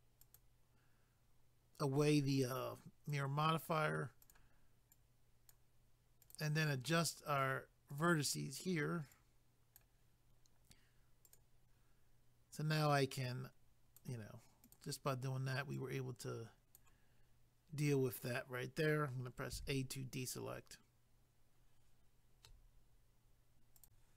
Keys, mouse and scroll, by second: 0.2 click, 2.3 click, 3.1 click, 4.2 click, 4.9 click, 6.2 click, 6.9 click, 9.1 click, 11.3 click, 12.8 click, 14.6 click, 15.7 click, 19.5 a, 23.8 click.